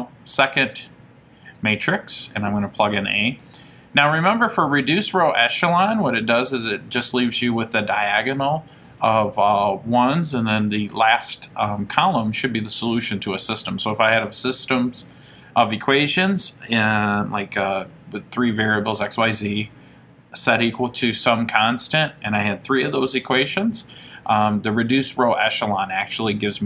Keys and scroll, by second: 3.5 Return, 5.3 ).